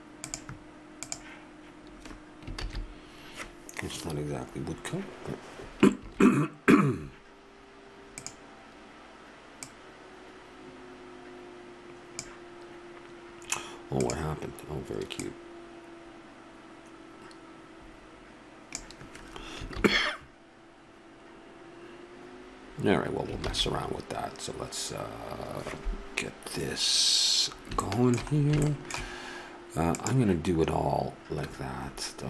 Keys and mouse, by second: 2.9 shift+z, 6.3 shift+z, 8.2-10.0 drag, 14.0-15.8 drag, 20.1 shift+z, 23.7 shift+z, 27.5-31.5 middle drag.